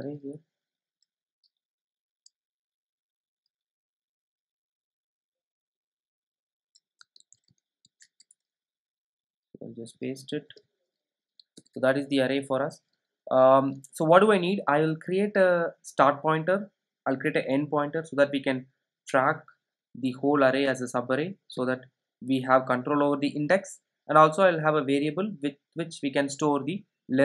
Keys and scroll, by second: 7.2 super+c, 8.2 super+e, 11.5 super+v.